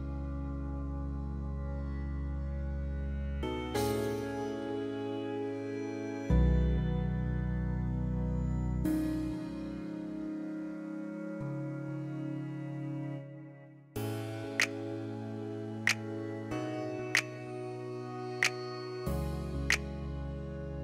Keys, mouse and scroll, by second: 1.2 middle click, 2.1 middle click, 3.2 click, 4.1 click, 5.0 KP_8, 5.2 KP_0, 5.4 Return, 7.1 click, 7.8 KP_6, 7.9 KP_0, 8.5 Return, 9.2 middle click, 10.1 middle click, 10.4-11.0 scroll down 1, 11.0 middle click, 11.5-12.5 scroll down 1, 14.2 shift+middle click, 16.6 shift+click, 17.3 KP_7, 17.5 KP_5, 17.7 Return, 18.8 middle click, 20.1-20.8 shift+middle drag.